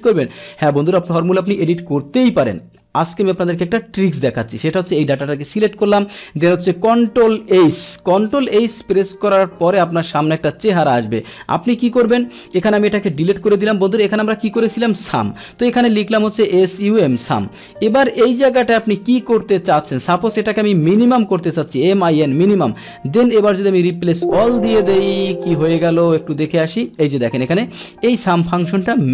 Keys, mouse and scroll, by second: 0.5 click, 4.9 click, 7.6 ctrl+h, 9.6-10.9 drag, 12.0 click, 12.7 Delete, 13.0 Delete, 13.2 click, 13.2 Delete, 13.6 Delete, 15.4 click, 17.8 Tab, 18.7 Delete, 20.0 click, 25.6-26.5 drag, 26.9 click, 28.2 click.